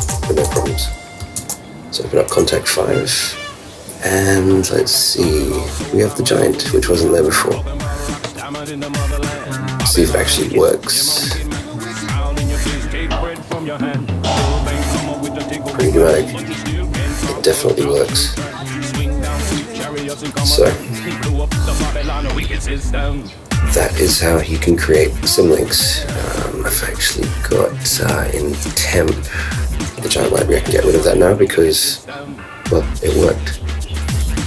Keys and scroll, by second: 0.4 shift+super+Return, 1.2 shift+Return, 1.4 super+space, 2.3 super+Return.